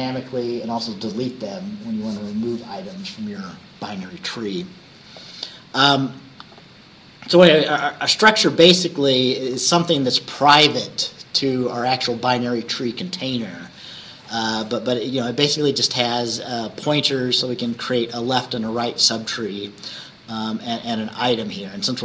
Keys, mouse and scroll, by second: 8.0 scroll down 2.